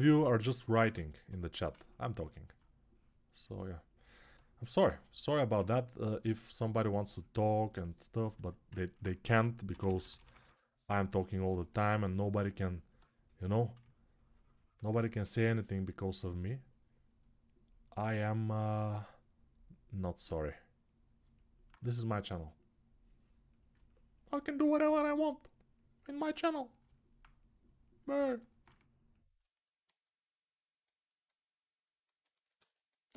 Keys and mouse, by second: 0.0 [, 0.5 [, 8.2 alt+q, 9.0 g, 9.4 ], 15.0-24.1 ctrl+alt+right drag, 18.4 g, 24.1-33.1 alt+drag.